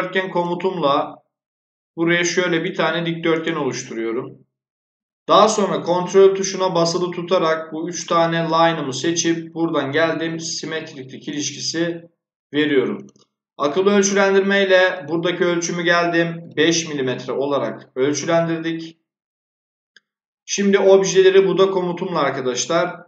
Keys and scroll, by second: 16.4 5, 17.0 Return.